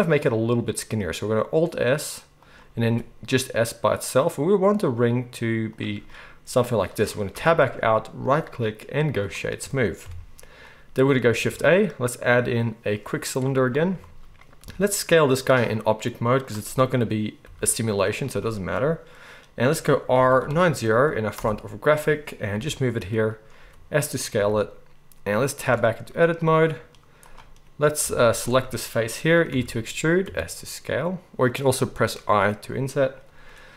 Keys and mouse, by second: 2.8 s, 7.3 Tab, 8.3-18.8 right drag, 10.0 KP_1, 11.4 shift+a, 14.6 s, 17.4 g, 18.8-26.6 drag, 20.1 r, 22.5 g, 23.6 s, 24.3 g, 25.6 Tab, 26.6-33.7 right drag, 28.2 alt+a, 28.3 alt+shift+click, 28.3 alt+shift+middle click, 29.5 e.